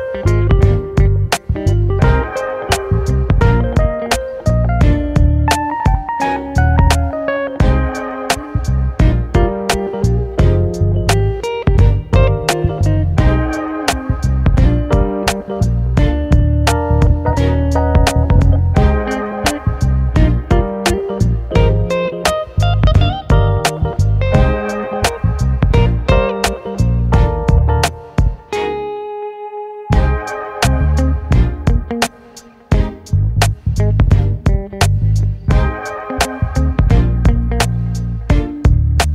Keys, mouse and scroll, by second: 3.5-4.2 scroll up 1, 4.2-6.3 scroll up 18, 6.3-7.3 drag, 7.3 KP_0, 7.5 KP_0, 8.8-11.3 middle drag, 11.3-12.5 drag, 12.5 KP_0, 12.5 KP_0, 13.9-14.3 scroll down 1, 14.3 middle drag, 14.6 click, 15.0-16.0 middle drag, 16.0-18.1 scroll down 2, 18.1 click, 18.7 shift+click, 19.3 shift+click, 19.7 shift+click, 20.5 shift+click, 22.0 click, 23.1-25.1 drag, 25.8-28.1 middle drag, 28.1 click, 29.9-32.0 drag, 32.3 click, 34.0-36.9 drag, 37.3 click, 37.9 click.